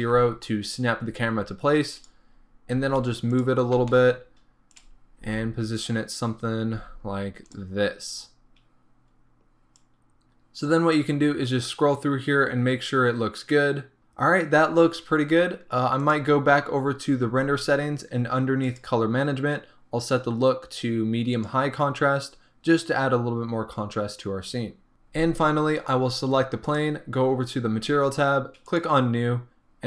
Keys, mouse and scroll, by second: 0.0 ctrl+alt+KP_0, 2.2 click, 2.4-2.8 scroll up 1, 2.8 g, 3.5 click, 3.7 scroll down 1, 3.8 g, 4.9 click, 5.0 scroll up 1, 5.3 g, 5.9 click, 6.3-6.8 scroll down 1, 6.8 g, 7.6 click, 7.8-8.4 scroll up 1, 8.4-9.0 scroll down 1, 10.0-16.2 drag, 21.6-24.9 drag, 24.1-24.9 scroll down 2, 28.8-29.3 drag.